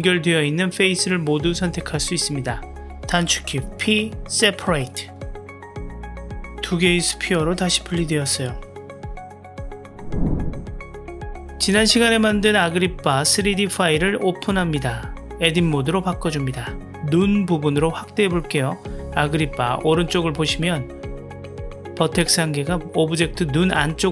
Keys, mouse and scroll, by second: 4.0 p, 6.1 Tab, 7.3 click, 7.7 g, 8.8 click, 9.0 g, 11.7-15.0 middle drag, 15.5 click, 16.2 Tab, 18.4-19.0 drag, 20.2 KP_Decimal, 21.4-22.4 middle drag, 22.9 click, 23.1-24.1 middle drag.